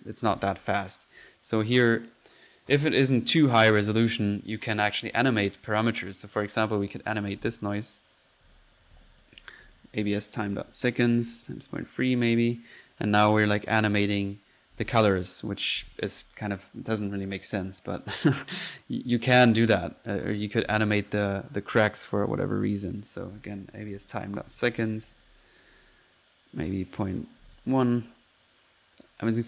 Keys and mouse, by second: 0.6 Delete, 1.2 drag, 2.1 drag, 2.7 click, 5.9-7.0 drag, 6.0-6.7 typing, 7.1 drag, 7.7 click, 13.2 click, 13.4 click, 13.9 drag, 18.0 click, 18.8 click, 19.0-19.8 typing, 21.3 click, 22.0-22.4 drag, 22.7-23.0 drag, 26.6 click, 28.1 middle click, 28.3-29.1 typing.